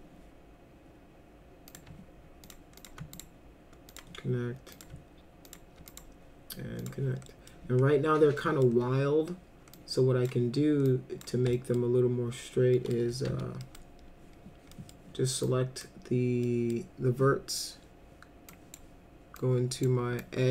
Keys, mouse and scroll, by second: 1.7 click, 2.5 ctrl+click, 2.8 ctrl+click, 3.1 right click, 3.9 click, 4.7 click, 5.5 ctrl+click, 5.9 right click, 6.8 click, 7.3 middle click, 8.4 middle click, 9.7-10.2 drag, 10.9-11.2 drag, 11.6 alt+middle click, 12.7 middle click, 12.9-13.8 typing, 13.6 middle drag, 14.7 middle click, 15.5-15.8 drag, 16.4 middle drag, 18.5 click, 19.4 click, 20.2-20.5 drag.